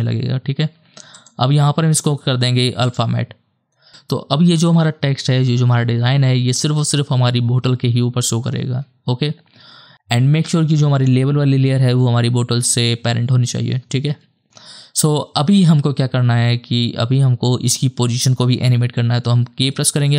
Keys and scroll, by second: 19.7 k.